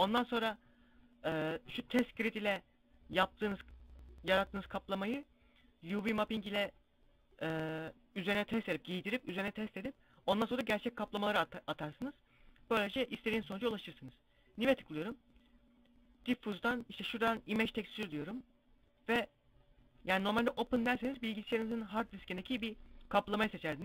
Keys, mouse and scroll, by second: 13.7 click, 22.8 click.